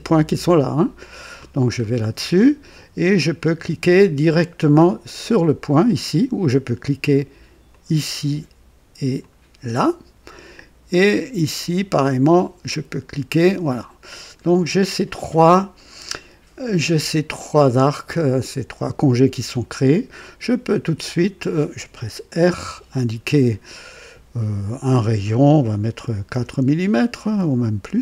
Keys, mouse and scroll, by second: 1.1 click, 1.7 scroll up 2, 5.0 click, 7.6 click, 9.1 click, 12.3 click, 13.6-14.0 scroll up 2, 14.6-15.8 right drag, 19.4 right click, 21.1 click, 22.5 r, 25.9 KP_4, 26.2 KP_Enter.